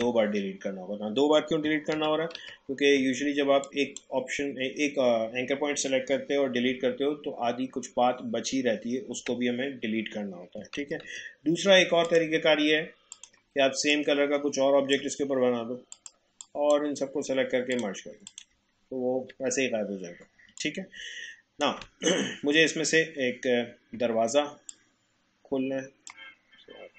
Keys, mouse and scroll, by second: 1.9 ctrl+z, 3.6-6.6 drag, 6.6 Delete, 9.1 Delete, 10.8 ctrl+z, 12.0-15.9 drag, 18.8 alt+scroll down 1, 20.4 space, 20.6 click, 20.9 space, 24.7-26.9 drag.